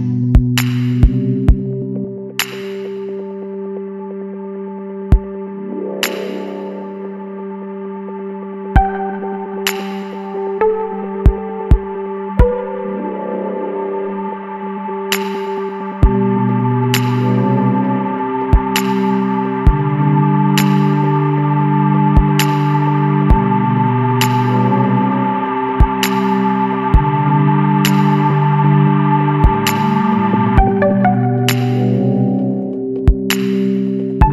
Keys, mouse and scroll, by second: 0.1 KP_1, 0.5 KP_Enter, 1.3 scroll up 2, 2.2 click, 5.1 click, 8.3 click, 10.9 click, 12.9 l, 15.2 click, 17.1 click, 19.2 l, 21.3 click, 22.6 click, 24.4 l, 26.5 click, 28.0 click, 30.7 l, 32.7 click.